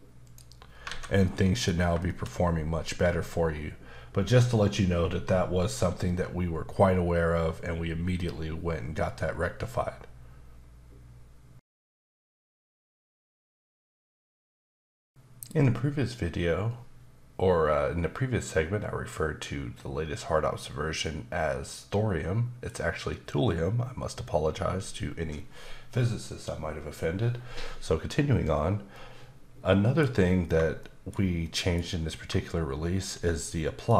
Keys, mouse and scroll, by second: 0.2 click, 0.9 alt+a, 1.2 middle click, 1.7 scroll down 1, 2.0 shift+middle click, 28.9 middle click, 30.8 shift+middle click, 33.4 middle click.